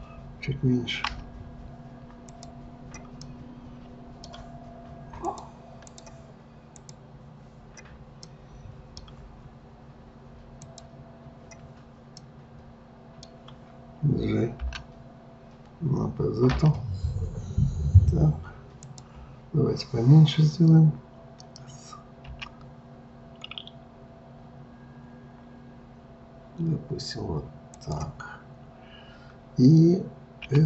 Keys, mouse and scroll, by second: 1.1 s, 2.3 click, 3.3-5.2 middle drag, 5.2-6.9 drag, 8.3-10.6 middle drag, 10.6 click, 12.2-14.6 middle drag, 14.6 g, 22.3 s, 30.5 s.